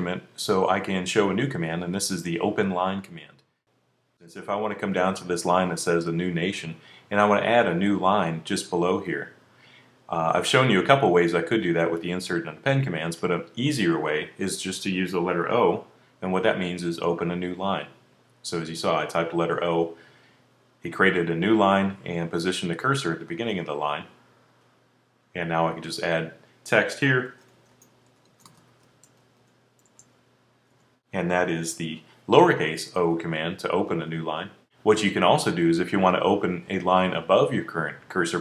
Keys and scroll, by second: 15.3 o.